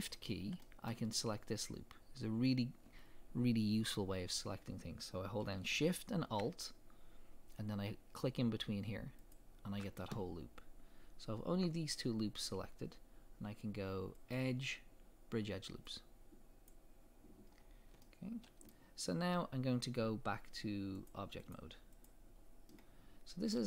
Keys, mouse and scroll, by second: 0.3-0.6 scroll up 2, 2.0-3.3 scroll up 2, 3.3-4.0 scroll up 1, 4.0-4.7 scroll up 1, 4.7-6.0 scroll up 1, 6.0-6.4 scroll up 1, 9.2 alt+shift+click, 14.2-18.0 drag, 17.6 scroll down 2, 18.0-21.0 middle drag, 21.0 click, 21.4-22.7 drag, 22.7-23.6 middle drag.